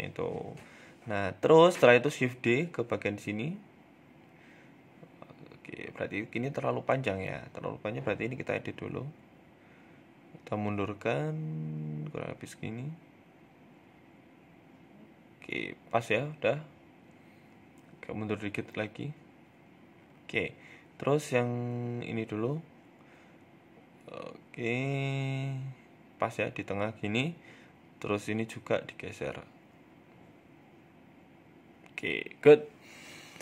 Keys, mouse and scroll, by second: 0.6 shift+d, 2.7 shift+middle click, 3.1 middle click, 4.5 g, 6.1 middle click, 6.9 right click, 7.3 middle click, 7.5 Tab, 7.8 middle click, 8.8 click, 10.3 g, 11.7 Tab, 11.8 middle click, 12.4 right click, 12.9 shift+right click, 13.4 g, 14.9 middle click, 15.8 shift+middle click, 16.1 middle click, 16.4 right click, 16.7 middle click, 16.9 Tab, 17.2 middle click, 18.4 g, 21.3 middle click, 22.0 click, 22.5 shift+middle click, 22.9 g, 24.3 ctrl+KP_3, 25.6 scroll up 1, 25.7 shift+middle click, 26.4 click, 27.2 g, 31.5-32.4 scroll down 4, 31.6 Tab, 31.9 middle click, 32.4-32.9 scroll up 3, 32.6 middle click, 32.9 Tab, 33.1 middle click.